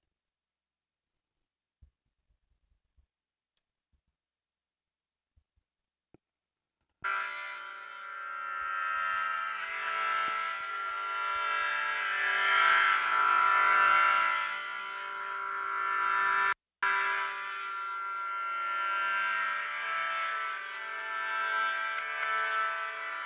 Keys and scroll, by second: 2.1 ctrl+Up, 8.9 super+=.